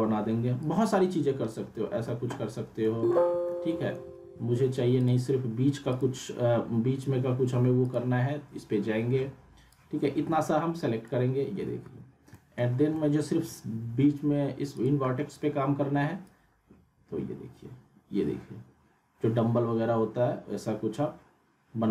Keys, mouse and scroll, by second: 0.6-1.5 drag, 1.7 alt+w, 2.8 alt+middle click, 3.1 alt+w, 4.0 ctrl+z, 5.0 click, 8.3-11.3 drag, 11.7 alt+w, 12.3 alt+middle click, 12.7 scroll up 1, 13.0-13.6 alt+middle drag, 14.7-21.9 drag.